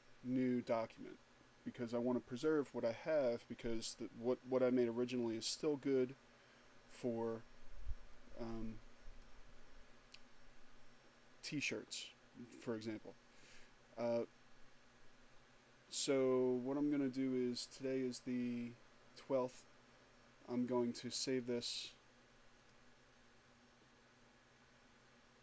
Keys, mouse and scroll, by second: 0.0 click, 8.3-9.6 drag, 17.8 click, 20.6 click, 22.6 click.